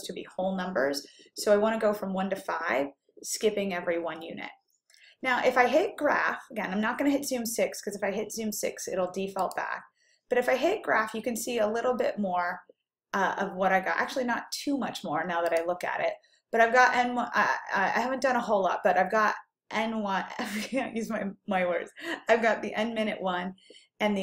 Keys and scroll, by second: 6.2 ÷, 10.8-11.5 typing.